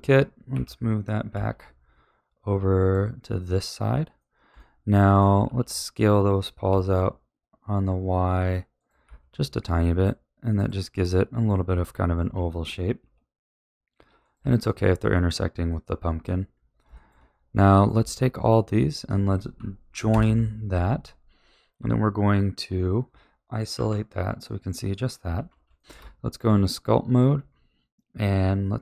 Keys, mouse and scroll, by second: 0.5 g, 3.3-5.4 middle drag, 5.4 s, 9.0 a, 9.4-10.5 middle drag, 10.5 click, 10.9-11.7 middle drag, 11.7-12.1 scroll up 2, 12.1 s, 14.4 a, 14.6-16.5 middle drag, 16.5-16.9 scroll down 3, 16.9-17.7 shift+middle drag, 17.7 click, 18.4 shift+click, 18.7 shift+click, 20.1 ctrl+j, 21.7 Tab, 23.7 KP_Divide, 24.4-25.3 middle drag, 25.3 ctrl+s, 25.7 shift+middle click, 25.9 Tab, 27.2-28.1 scroll up 2, 28.1-28.8 scroll down 1.